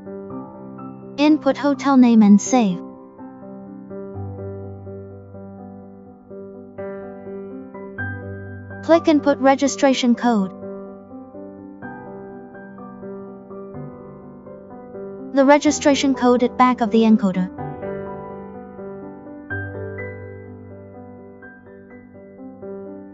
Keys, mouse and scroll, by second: 2.7 click, 7.3 click, 9.0 click, 12.8 click, 20.7 click.